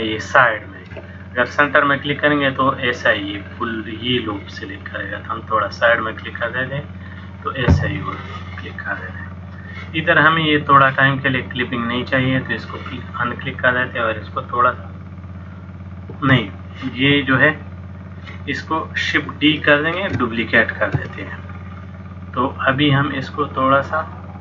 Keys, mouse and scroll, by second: 6.4 middle click, 12.2 click, 14.4 click, 20.0 shift+d, 22.8 click.